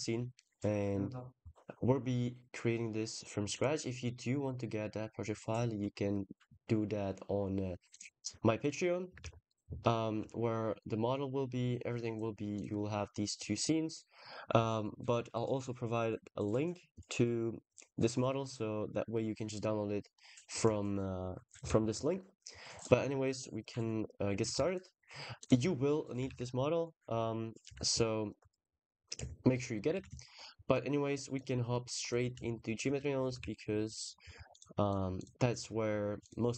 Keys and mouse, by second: 9.1 ctrl+s, 20.0 middle click, 21.5 ctrl+s, 22.6 click, 24.4 ctrl+s, 25.9 click, 26.1 ctrl+s, 26.9 KP_0, 28.3 click, 29.4 middle drag, 29.8 ctrl+s, 31.1 click, 32.6 middle click, 33.2 ctrl+s, 34.3 click, 34.7 click, 35.0-36.2 drag.